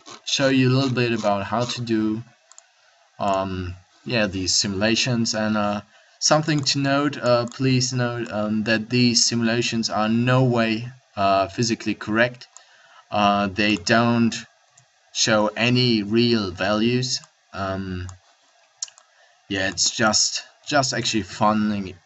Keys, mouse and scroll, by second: 4.9 a, 10.1-13.6 middle drag.